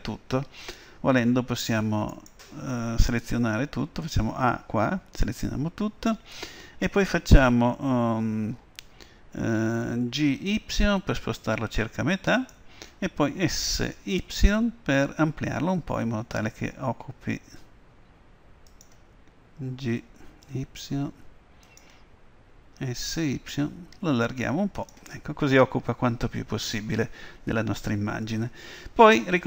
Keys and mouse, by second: 2.2-4.0 right drag, 3.4 a, 4.1 a, 10.2 g, 13.4 s, 20.1 g, 22.8 s.